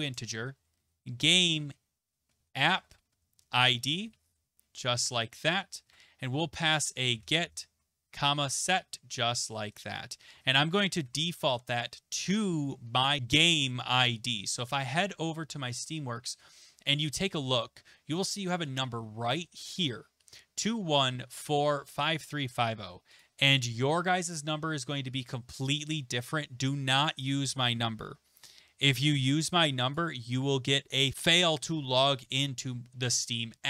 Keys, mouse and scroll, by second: 0.3-9.6 typing, 10.8-11.5 typing, 14.7 click, 20.3 click, 23.2 click, 27.7 click.